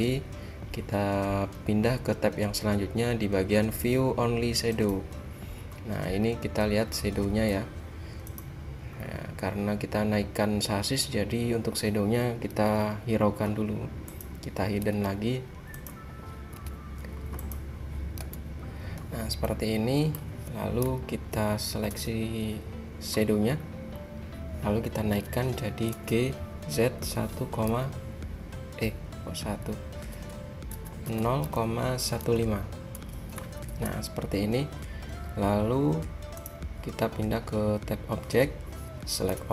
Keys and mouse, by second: 4.8-6.6 drag, 6.6 middle click, 6.8 middle click, 7.0 middle click, 7.2 middle click, 8.4-9.9 drag, 9.9-12.7 middle drag, 12.7 h, 14.2-19.3 drag, 15.0 h, 16.6 h, 18.3 h, 19.7 middle click, 21.1 KP_3, 22.0 a, 23.7 click, 25.3 g, 36.5-39.4 drag, 39.4 a.